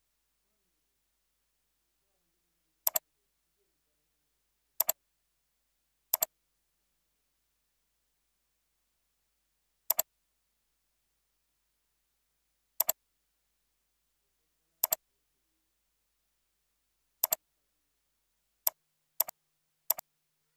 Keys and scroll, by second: 6.4 ctrl+c, 7.1 ctrl+a, 8.4 ctrl+v, 11.2 ctrl+v, 16.5 ctrl+b, 20.2 ctrl+Left.